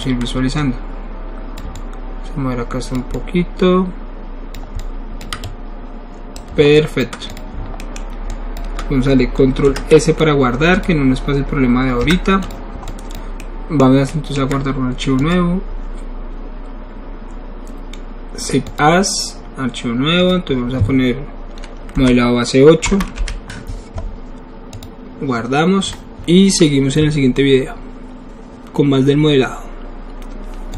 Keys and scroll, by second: 9.6 ctrl+alt+s, 12.0 1, 12.7 alt+1, 22.0 Left, 22.8 BackSpace, 23.1 KP_8.